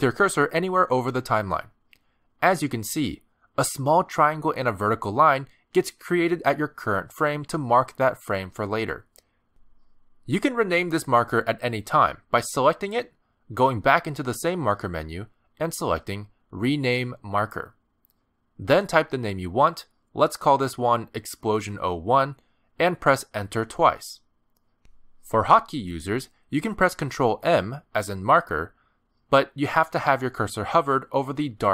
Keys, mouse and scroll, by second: 4.9 click, 13.9 click, 22.7 BackSpace, 24.5 Return, 30.7 ctrl+m.